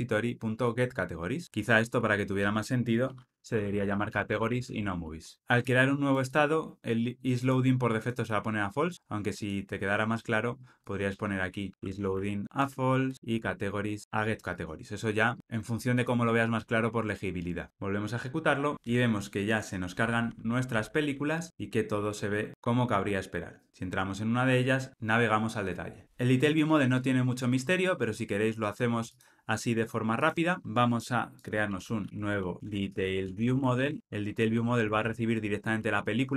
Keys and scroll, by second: 3.1 shift+F6, 12.4 Tab, 17.7 ctrl+r, 30.2 alt+shift+super+o, 32.0 super+n.